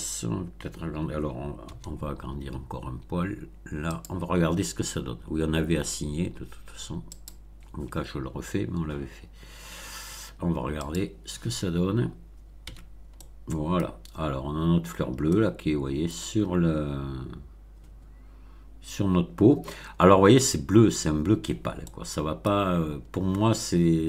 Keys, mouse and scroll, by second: 1.6 s, 3.9 click, 7.1 click, 9.1-9.8 scroll down 2, 10.8 click, 12.6 Tab, 13.1-13.9 middle drag, 14.2-15.2 scroll up 1, 15.2-16.2 middle drag, 21.8-22.6 middle drag.